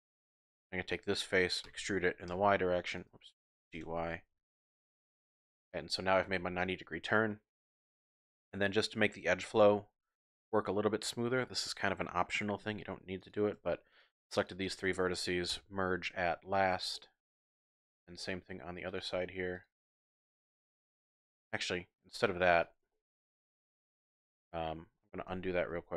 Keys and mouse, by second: 0.3 click, 1.6 e, 2.3 y, 3.0 click, 3.6 g, 3.8 y, 5.3 click, 5.7 click, 7.3 click, 9.5 ctrl+r, 12.6 1, 14.0 shift+click, 15.5 m, 16.9 click, 17.5 shift+click, 18.1 click, 18.9 click, 19.5 shift+click, 20.1 shift+click, 22.5 click, 22.9-24.6 drag, 22.9 typing, 25.3 ctrl+z, 25.7 ctrl+z.